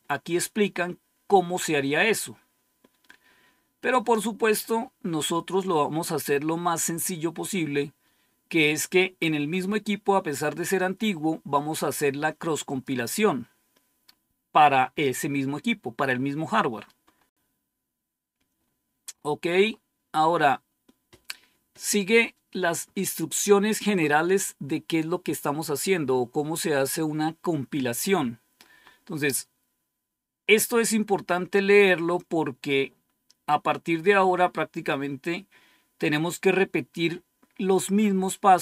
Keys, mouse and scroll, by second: 0.5-1.3 scroll down 1, 1.3-1.8 scroll down 1, 2.3-2.9 scroll down 2, 3.4-4.4 scroll down 4, 6.3-6.7 scroll down 2, 6.8-7.4 scroll down 2, 7.4 scroll down 1, 7.9-8.7 scroll down 2, 12.6 click, 16.8-17.1 scroll up 1, 17.1-18.2 scroll down 1, 18.4-19.0 scroll up 2, 19.0-21.0 scroll up 2, 29.3-30.6 scroll down 3, 30.6 scroll down 1, 33.0-33.3 scroll down 2, 33.9-34.2 scroll down 1, 37.3-37.8 scroll down 1.